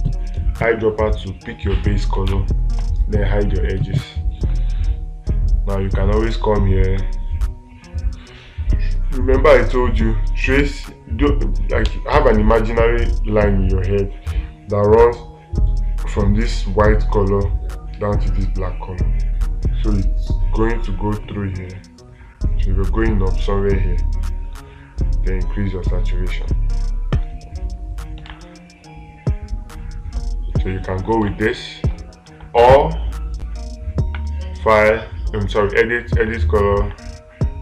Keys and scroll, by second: 2.7 ctrl+space, 28.7 ctrl+space, 31.7 ctrl+space, 32.7 ctrl+z.